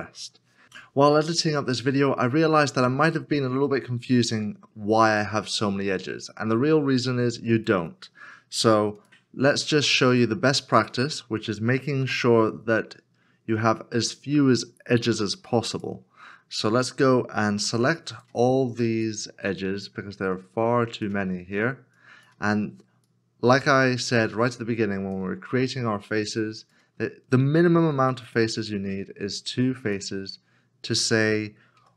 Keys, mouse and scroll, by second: 9.0 shift+click, 12.0 x, 17.5 2, 18.9 shift+click, 21.9 shift+click, 23.1 shift+click, 24.5 shift+click, 26.4 shift+click, 28.0 x, 31.8 x.